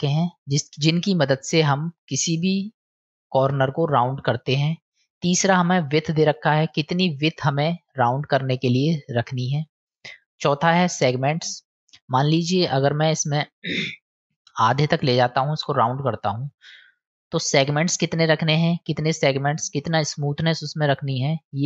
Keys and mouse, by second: 6.7-9.7 drag, 11.3-12.9 drag, 13.6-14.9 drag, 17.1-21.6 drag.